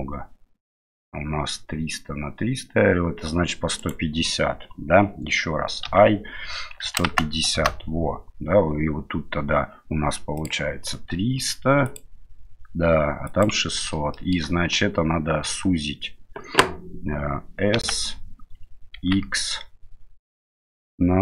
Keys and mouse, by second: 5.9 i, 10.4-13.8 drag, 14.3 shift+middle click, 17.8 s.